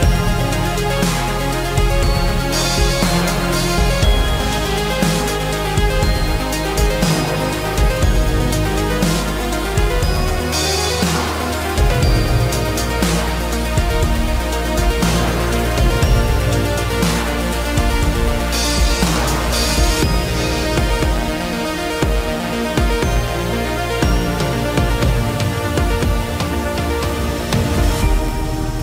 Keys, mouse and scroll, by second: 0.2 q, 3.8-4.6 typing, 5.3 shift+middle click, 8.6 space, 10.1 shift+x, 15.9 shift+middle click, 16.9 space, 17.6 shift+click, 17.9 shift+middle click, 28.4 shift+middle click.